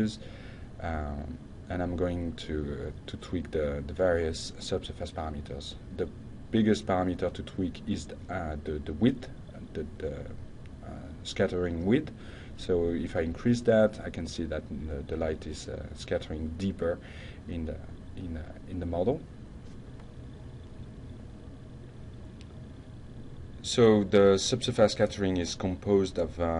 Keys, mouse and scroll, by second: 1.3 click, 6.5 click, 7.8 1, 8.5 Return, 14.6-15.4 shift+middle drag, 15.9 F5.